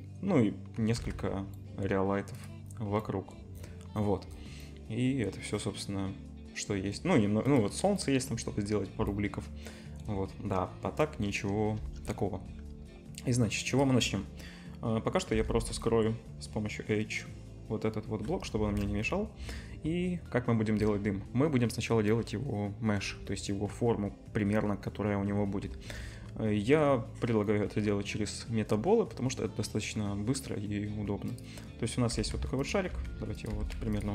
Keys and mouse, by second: 0.0-1.2 middle drag, 1.0 z, 2.0-2.3 middle drag, 2.3 click, 2.4-7.4 middle drag, 7.4 click, 7.6-9.4 middle drag, 10.3-12.0 middle drag, 11.8 KP_0, 13.7 click, 15.3 h, 18.7 shift+a, 18.8-22.2 drag, 25.6 shift+a, 32.1-34.1 typing.